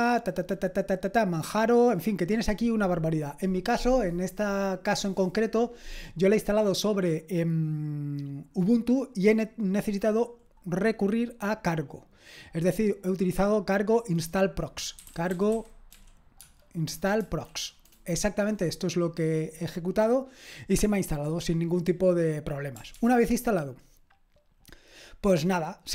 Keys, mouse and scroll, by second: 14.8-17.2 typing, 15.1 click, 23.0 ctrl+c.